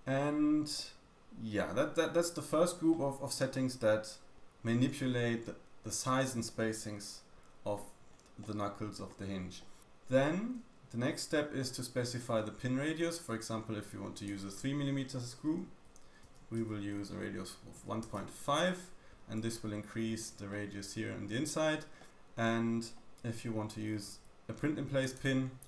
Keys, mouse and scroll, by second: 2.1 middle click, 2.9 middle click, 4.4 middle click, 8.4 middle click, 11.3 middle click, 12.5 scroll up 1, 14.1 click, 20.5 middle click, 21.4-22.0 scroll up 1, 22.0 middle click, 24.6-25.6 drag.